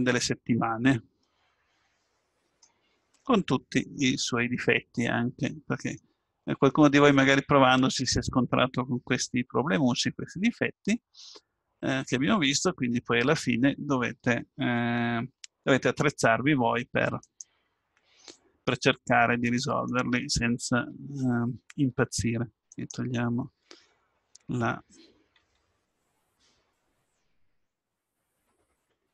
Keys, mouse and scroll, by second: 1.2 middle click, 5.0 middle click, 5.2 middle click, 5.4 middle click, 11.4 middle click, 11.9 middle click, 17.2-19.1 right drag, 19.4-21.4 middle drag, 21.7-23.1 middle drag, 23.1-24.4 right drag, 25.4 l, 28.8 x.